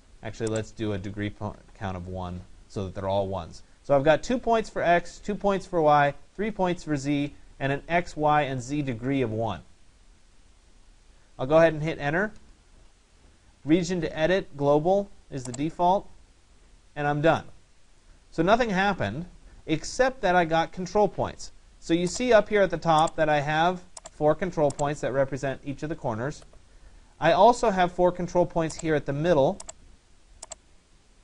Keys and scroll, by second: 1.4 1, 12.3 Return.